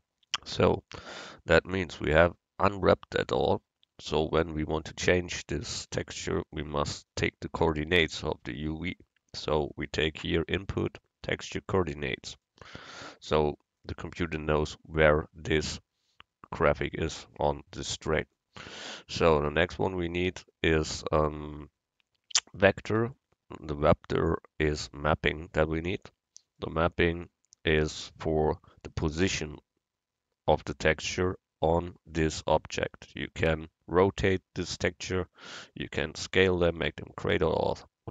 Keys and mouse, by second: 0.4-3.3 drag, 0.4-1.6 right drag, 3.3-7.2 middle drag, 7.2-9.0 drag, 18.3-20.2 drag.